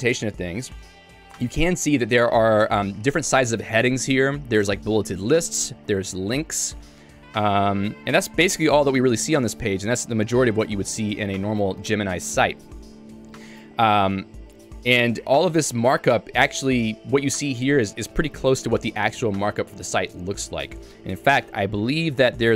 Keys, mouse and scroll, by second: 2.2-3.8 typing, 6.8 ctrl+d, 7.1 ctrl+d, 7.6 ctrl+d, 8.3 ctrl+u, 8.6 ctrl+u, 9.6 k.